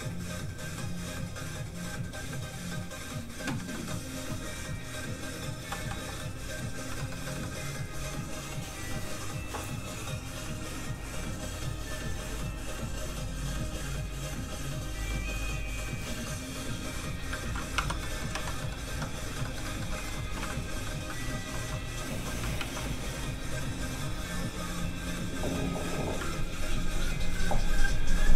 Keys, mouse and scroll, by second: 3.7 middle click, 4.9 click, 5.8 x, 6.5-6.8 scroll up 1, 6.9 shift+middle click, 7.2 middle click, 7.3 middle click, 17.4 ctrl+s, 17.7 Tab, 18.0 middle click, 18.3 a, 18.6 middle click, 18.7 scroll up 1, 18.8 Tab, 19.4 shift+middle click, 19.6 middle click, 19.7 middle click, 19.9 shift+middle click, 21.0 shift+scroll up 1, 22.6 ctrl+shift+s, 24.9 click.